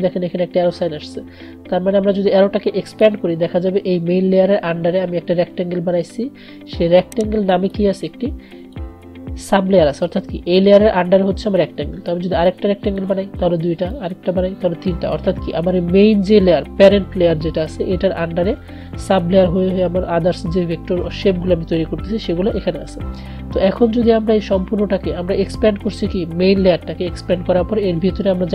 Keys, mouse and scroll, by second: 8.1-11.4 drag, 12.6-28.5 drag.